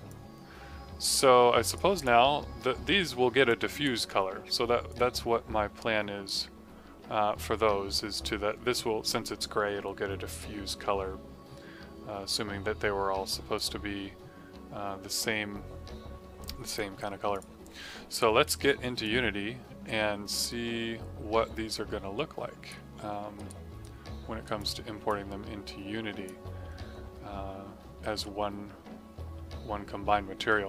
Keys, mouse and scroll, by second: 0.0 click, 1.9 click, 2.5 scroll, 2.8 middle click, 3.4 alt+click, 4.8 click, 13.5 click, 17.3 click, 19.0 click, 22.9 middle click, 23.3 right click, 23.8 right click, 24.5 click, 25.0 click.